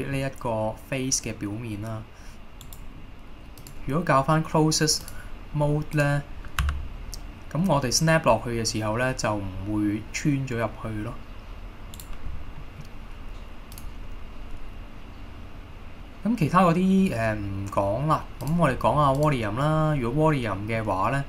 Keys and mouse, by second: 2.7 right click, 3.9-5.5 drag, 6.1-6.7 drag, 6.7 g, 12.1 right click, 12.7 middle click, 13.8-18.9 drag, 20.4 middle click.